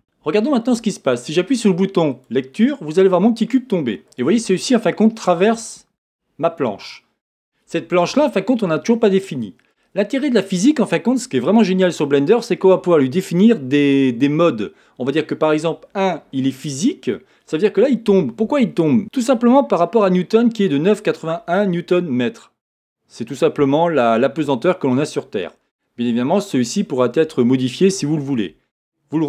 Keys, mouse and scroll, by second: 2.1-4.3 drag, 5.1-6.6 middle drag, 6.6 click, 9.7-15.6 drag, 16.1-19.0 middle drag, 29.1 click.